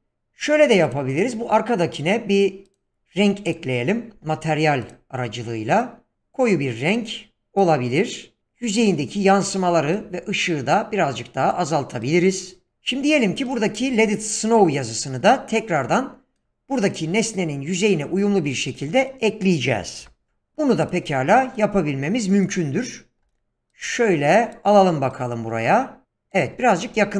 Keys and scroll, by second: 13.8 g, 19.9-20.8 typing.